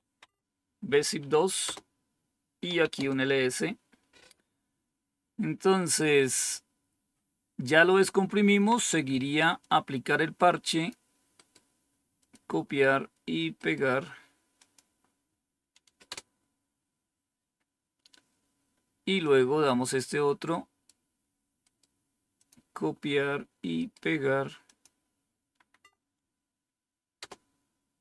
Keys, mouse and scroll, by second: 0.0-0.2 typing, 1.6 Return, 2.3-3.2 typing, 9.5-10.9 drag, 11.3 right click, 12.1 click, 14.5 click, 16.0 Return, 19.1-20.8 drag, 21.6 right click, 22.3 click, 22.7 click, 24.6 click, 25.7 Right, 27.1 Return.